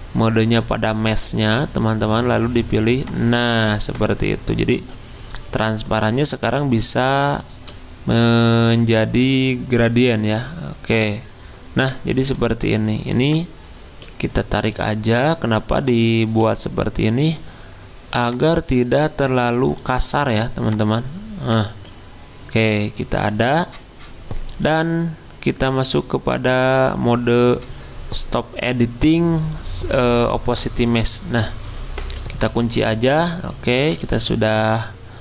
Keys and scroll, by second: 6.5 g, 32.4 ctrl+2, 34.0 ctrl+z.